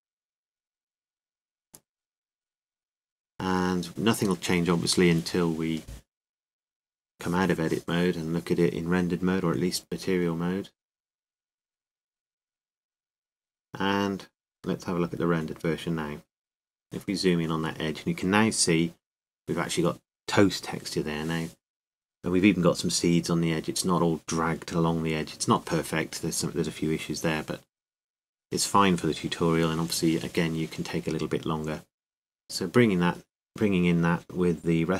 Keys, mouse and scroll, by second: 1.4 s, 10.0 Tab, 12.7-16.0 drag, 17.1-18.9 middle drag, 18.9-25.3 scroll up 1, 25.3-28.4 drag, 31.2 click.